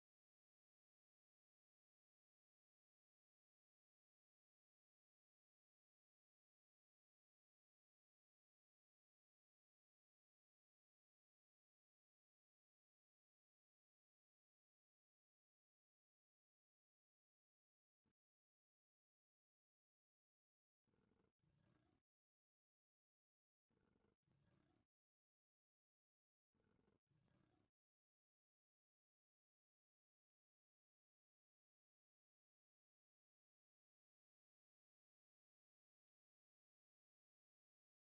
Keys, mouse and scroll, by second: 0.1 click, 0.8 shift+click, 2.4 f, 4.5-8.3 middle drag, 8.6-10.0 middle drag, 10.9 click, 13.0 v, 13.5 right click, 13.7 v, 14.9-16.8 typing, 16.0 right click, 17.5 click, 18.4 ctrl+x, 22.7 click, 23.5 click, 24.0 x, 26.1-27.4 middle drag, 27.7 shift+middle click, 29.6 click, 30.4 click, 32.1 v, 32.8-33.9 right drag, 36.2 v, 37.5 click.